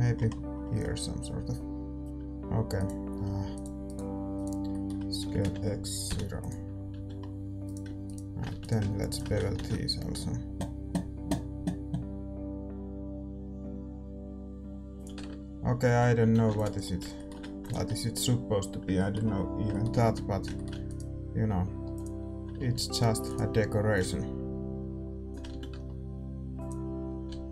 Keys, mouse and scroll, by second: 2.0-6.4 right drag, 2.0 g, 2.0 a, 4.6-6.7 middle drag, 5.2 s, 6.9 a, 7.1-9.5 middle drag, 7.6-11.6 right drag, 8.5 a, 9.5 ctrl+b, 15.1 Tab, 15.2-15.8 scroll up 1, 15.8-16.8 scroll up 1, 15.8 a, 16.2 a, 16.8 ctrl+s, 16.8 middle click, 17.6-19.6 drag, 19.6-22.4 middle drag, 20.1 Tab, 20.7 a, 20.8-22.4 right drag, 21.8 e, 22.4 click, 22.4 r, 22.5 a, 22.5-24.7 middle drag, 23.2-25.2 right drag, 23.9-25.7 drag, 25.4 a, 25.7 Tab, 25.7 middle click, 26.5-27.5 drag, 27.0 a, 27.2 a.